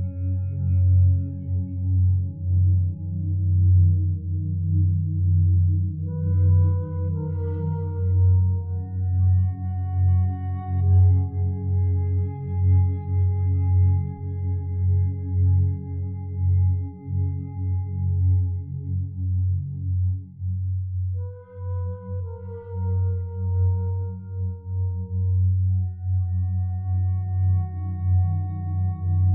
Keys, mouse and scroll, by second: 22.7 F9.